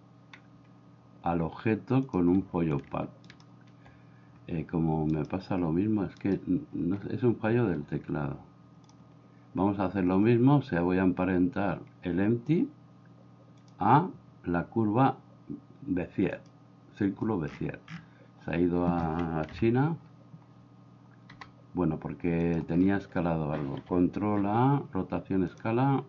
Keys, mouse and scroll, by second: 8.9 click, 13.6-16.5 drag, 19.5 KP_1, 21.4 g, 24.2 ctrl+a.